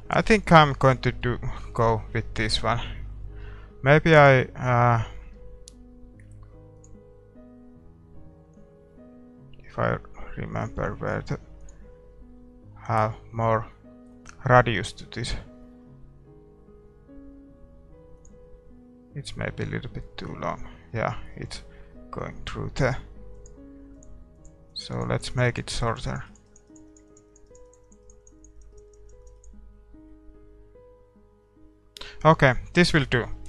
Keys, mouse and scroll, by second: 12.0-15.0 drag, 17.2-20.0 drag, 19.4-23.8 middle drag, 23.8-30.8 drag, 30.1 middle click, 31.7 middle click, 32.4 middle click, 33.3-33.4 middle drag.